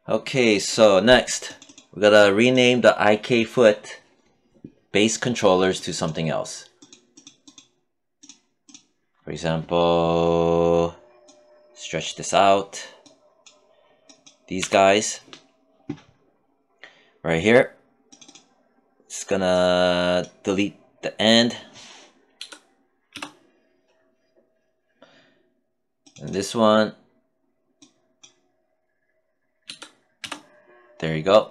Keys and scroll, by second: 14.0 w, 21.8 BackSpace, 22.5 Return, 29.0 BackSpace, 29.6 Return.